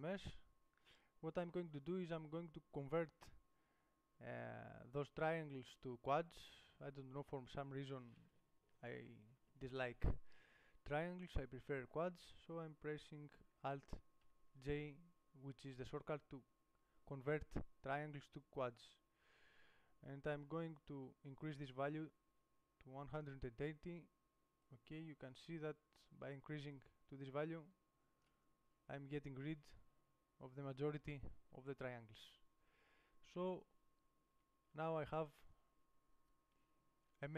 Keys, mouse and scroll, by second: 14.5 alt+j, 21.6 middle click, 22.7 middle click, 24.9 click, 26.8 middle click, 27.0 click, 28.5 click, 28.9-33.4 middle drag, 34.6 Tab, 34.9 Tab.